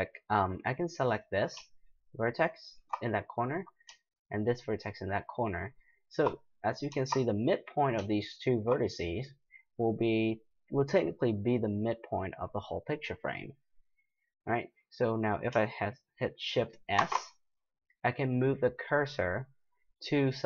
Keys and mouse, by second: 1.1-2.6 middle drag, 2.6-6.5 right drag, 6.5-8.5 middle drag, 17.0 shift+s.